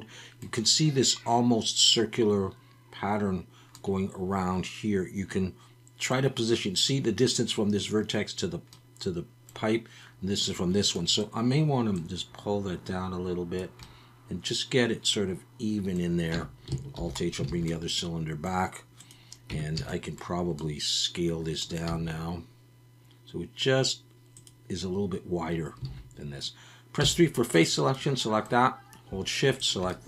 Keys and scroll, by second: 16.3 Tab, 17.0 alt+h, 17.5 alt+a, 19.5 Tab, 19.7 a, 21.9 s, 25.9 alt+a, 27.0 3.